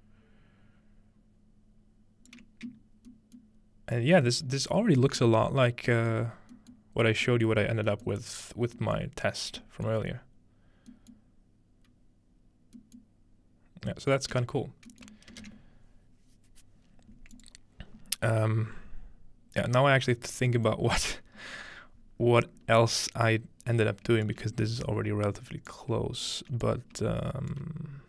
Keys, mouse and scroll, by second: 3.1-3.6 middle drag, 4.2 middle click, 5.0 middle click, 5.3-5.9 middle drag, 6.5 middle drag, 10.5-10.9 middle drag, 11.9-12.8 middle drag, 13.0-14.9 middle drag, 14.3 space, 15.1-17.3 ctrl+middle drag, 17.4 click, 20.2 scroll down 1, 20.7 middle click, 21.2 scroll down 1, 21.5-22.1 scroll up 4, 22.5 scroll down 2, 23.7-24.9 drag, 24.5-25.0 scroll down 2, 24.7 ctrl+middle click, 25.0 scroll up 2, 25.8 ctrl+click, 26.7 ctrl+click.